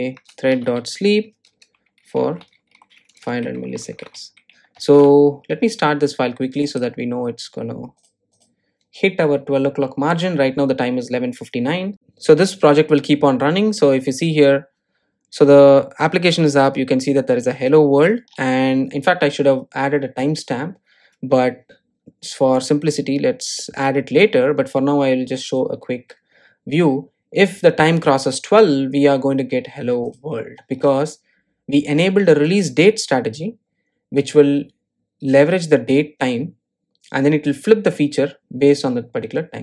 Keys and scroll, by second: 1.0 Return, 5.7 super+s.